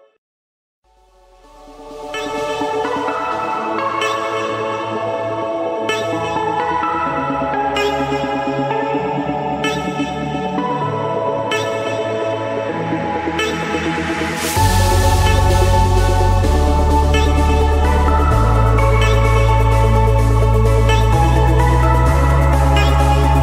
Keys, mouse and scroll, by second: 1.6 click, 2.2 middle click, 2.6 middle click, 3.5 middle click, 3.5 middle click, 3.6 middle click, 3.7 scroll, 4.3 Return, 4.8 Return, 5.2 middle click, 5.4 middle click, 6.2 Return, 7.7 click, 9.0 click, 10.3-10.8 scroll, 12.0 click, 12.5 scroll, 13.2 Return, 14.4 click, 15.7 click, 17.7 click, 18.0 Return, 18.3 Return, 19.1 Return, 21.2 click, 22.7 click, 23.2 Return.